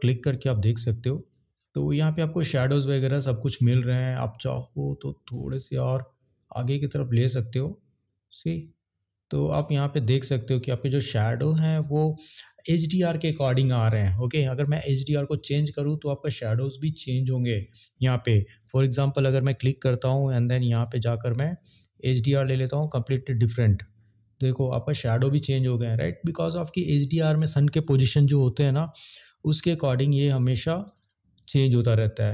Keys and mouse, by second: 5.3 click, 20.7 click, 29.0-29.3 drag.